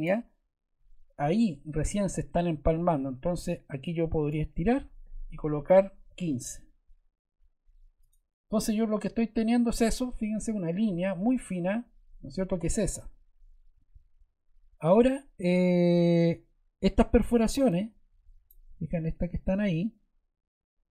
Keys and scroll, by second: 5.7 1, 6.0 5.